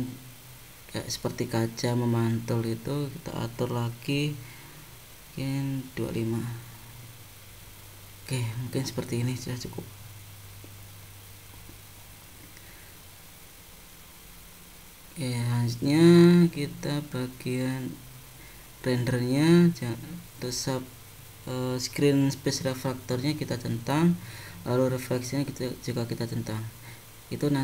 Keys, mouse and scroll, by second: 3.6 click, 7.2 middle click, 8.4 scroll up 2, 8.9 middle click, 17.6 click, 21.8 click, 23.6 click, 25.3 click.